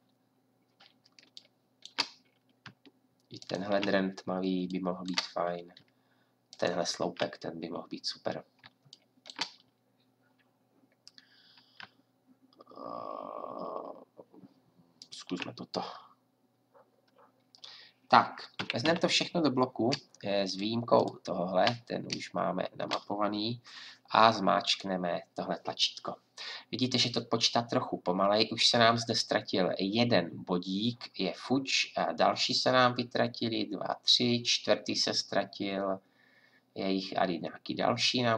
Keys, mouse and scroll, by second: 3.4-5.2 drag, 6.5-15.0 drag, 18.6 a, 18.8 a.